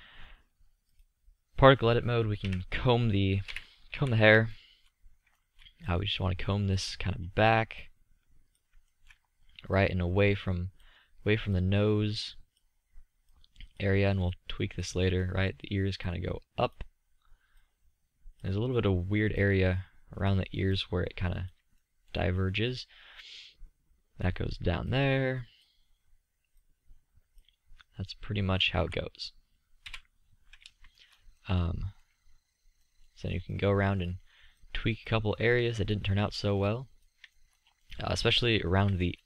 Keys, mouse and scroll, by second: 2.7 KP_3, 3.8 KP_5, 4.2 z, 16.4-19.5 middle drag, 28.1-28.7 middle drag, 29.1 z, 30.1 KP_1.